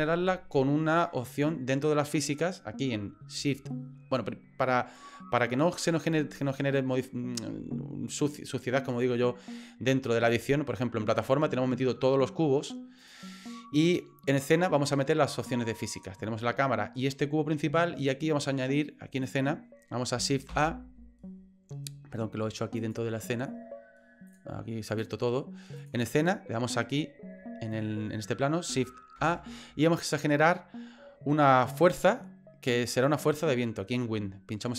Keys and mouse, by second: 13.0 click, 14.3 click, 15.4 click, 18.0 click, 20.5 shift+a, 22.8 click, 24.3 click, 24.9 click, 25.7 click, 29.1 shift+a.